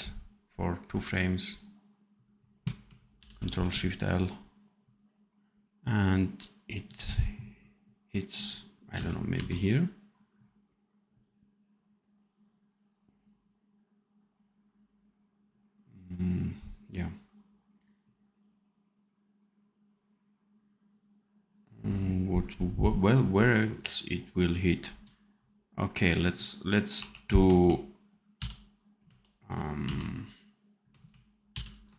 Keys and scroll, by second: 8.8 space, 9.2 v, 28.3 ctrl+shift+j, 29.7 ctrl+z, 31.4 ctrl+shift+l.